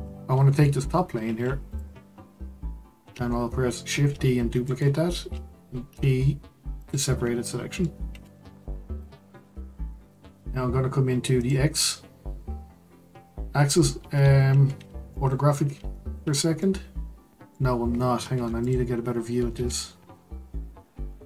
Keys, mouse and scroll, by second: 0.2 Tab, 1.7 click, 2.0-3.9 scroll down 2, 3.9 shift+d, 5.9 p, 7.4-8.1 middle drag, 8.1 Tab, 9.4 Tab, 11.4 click, 14.5-15.1 scroll up 1, 15.1-18.3 shift+middle drag, 18.3 Tab, 18.6 click, 19.5 Tab.